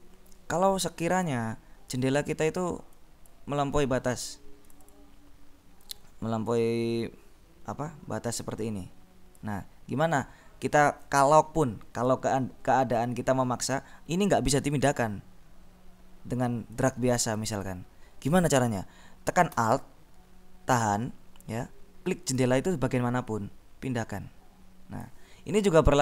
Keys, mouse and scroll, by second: 1.0 click, 3.0 click, 4.6 click, 5.9-10.0 drag, 17.1 click, 23.5-25.7 alt+drag.